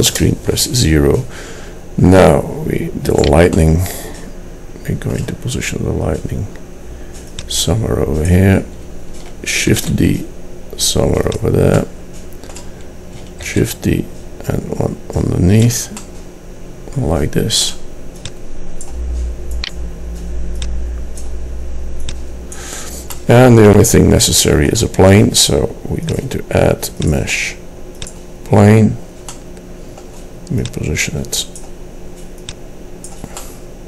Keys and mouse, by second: 0.3 KP_0, 3.2 click, 7.5-9.9 drag, 9.9 shift+d, 11.9-13.4 drag, 13.6 shift+d, 16.2-18.5 drag, 19.8 middle click, 20.7 middle click, 23.3 click, 29.2 middle click, 29.3-30.7 drag, 30.7 middle click, 31.6-33.5 drag, 33.5 middle click.